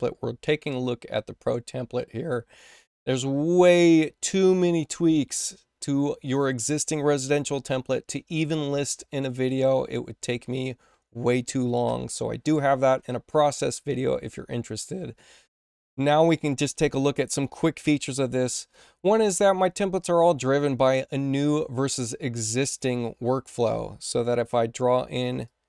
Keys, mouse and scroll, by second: 18.5 click, 20.5 click, 22.6 click, 24.0 click, 25.4 click.